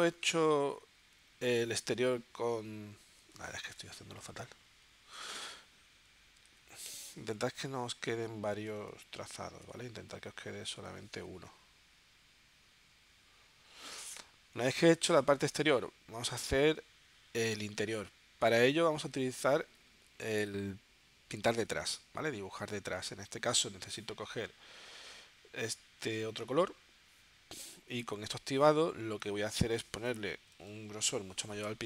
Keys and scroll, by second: 0.5 v, 6.4 super+z, 30.2 0.